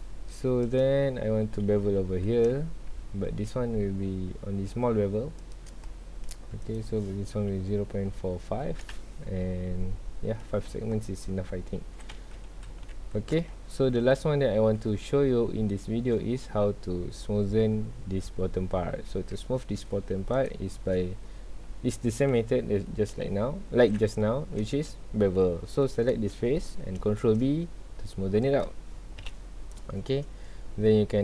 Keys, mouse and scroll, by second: 0.6 alt+click, 2.2 ctrl+b, 5.5 shift+click, 6.6-8.9 drag, 8.9 KP_Enter, 11.8 alt+a, 12.6-13.2 scroll down 2, 12.9 ctrl+s, 13.6-14.1 shift+middle drag, 14.1-14.5 scroll up 2, 14.5-14.8 scroll down 2, 14.8-15.4 shift+middle drag, 15.4 scroll up 2, 15.9 scroll down 1, 16.7-17.5 scroll up 2, 17.5-18.6 scroll up 1, 18.6-19.1 scroll up 1, 19.1 Tab, 19.4 scroll down 1, 19.6 middle click, 20.1 3, 20.3 click, 20.8 scroll up 1, 22.3 KP_1, 24.4 scroll down 1, 24.6-26.6 middle drag, 26.6-27.2 scroll up 1, 27.2 ctrl+b, 28.6 click, 29.2 KP_1.